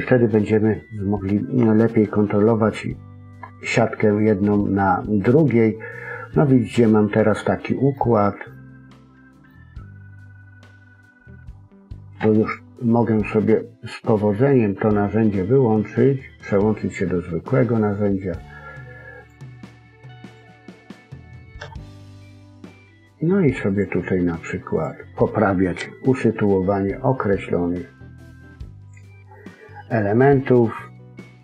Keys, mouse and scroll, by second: 8.0-9.0 scroll up 3, 8.4 middle click, 16.3 click, 16.8-17.4 scroll up 2, 18.6 click, 20.2 click, 21.5 g, 24.7 click, 25.7 g, 29.0-30.0 scroll down 2, 29.3 middle click.